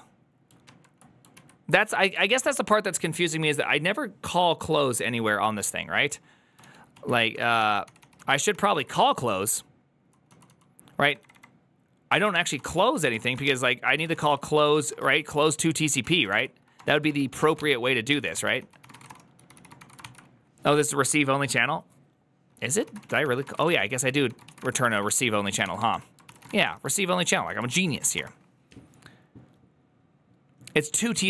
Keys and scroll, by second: 0.5 alt++, 1.2 alt+[, 1.6 alt+{, 2.1 alt+[, 6.9 alt+[, 6.9 alt+{, 7.3 ctrl+a, 7.5-17.4 typing, 7.7 ctrl+c, 7.8 ctrl+c, 8.0 ctrl+u, 18.0 Tab, 18.2 ctrl+c, 18.3 ctrl+c, 18.6-20.1 typing, 22.9-26.8 typing, 27.2 Return, 27.2 ctrl+o, 27.6 ctrl+c, 27.9 typing, 28.0 Return.